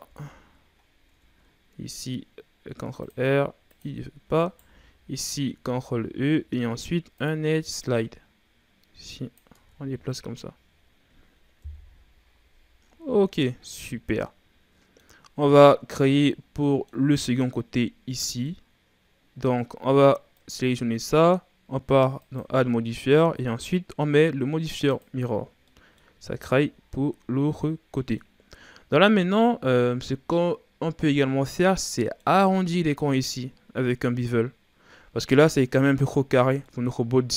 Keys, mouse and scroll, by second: 0.0 Tab, 0.2-0.8 scroll down 3, 0.8 scroll up 1, 1.1 Tab, 2.6 ctrl+r, 4.4 alt+right click, 5.0-5.6 scroll up 3, 5.6 ctrl+e, 9.5 Tab, 9.9-11.6 scroll down 9, 11.6 KP_1, 12.8-13.4 scroll down 4, 13.4-13.7 scroll down 1, 13.7-15.3 middle drag, 15.3-15.6 scroll up 1, 15.6-16.0 scroll down 1, 16.0-16.5 scroll up 2, 16.5 scroll down 1, 16.7-19.8 middle drag, 19.8-20.3 scroll up 1, 20.3 right click, 25.0 click, 25.6 scroll down 1, 25.7-26.2 middle drag, 26.2 a, 26.5-28.5 middle drag, 28.5-31.6 scroll up 2, 31.9-34.9 middle drag, 36.3-36.6 scroll down 3, 36.6-37.1 scroll up 3.